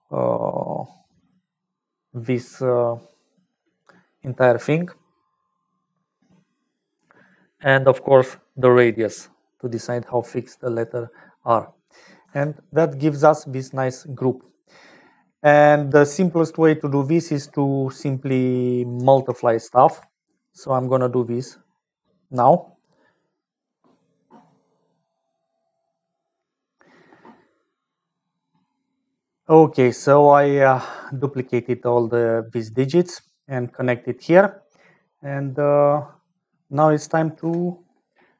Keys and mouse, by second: 0.8-3.7 drag, 8.6-9.7 drag, 11.0 middle click, 12.2 Tab, 13.1 middle click, 14.2-15.8 drag, 18.9 ctrl+s, 30.5 middle click, 32.9 middle click.